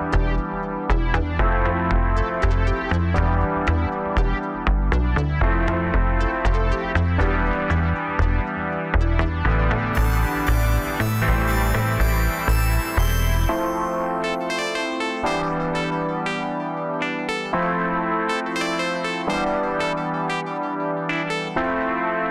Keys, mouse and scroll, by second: 0.8 KP_1, 1.3 scroll down 2, 2.3 e, 4.1 scroll down 2, 4.4 middle click, 5.2 scroll up 2, 5.5-6.7 middle drag, 6.7 KP_3, 7.4 scroll up 1, 8.1 s, 9.2-9.7 scroll down 2, 9.7 KP_1, 10.4 scroll down 2, 10.7-12.8 middle drag, 12.8 KP_7, 13.4-14.5 scroll up 1, 14.5 3, 14.8 click, 15.8-16.1 scroll down 1, 16.1 scroll up 2, 16.8 x, 18.7 middle click, 19.5-20.7 scroll up 2, 20.9 2, 21.4-22.3 middle drag.